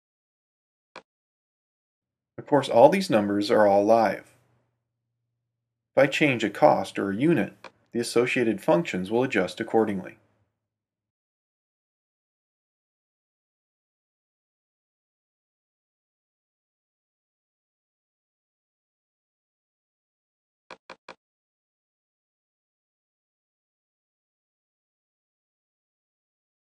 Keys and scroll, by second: 0.0 super+v, 2.3 BackSpace, 9.6-10.6 typing, 10.7 Return, 15.5-18.2 typing, 18.5 Return, 22.3-23.2 typing, 23.7 Tab.